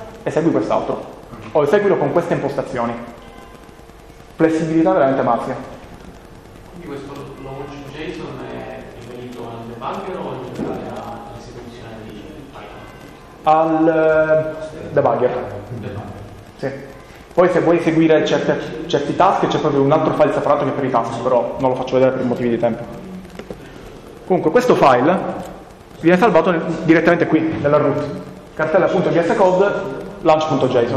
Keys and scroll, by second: 5.8 Down, 6.0 Down, 16.9 Down, 17.1 Down.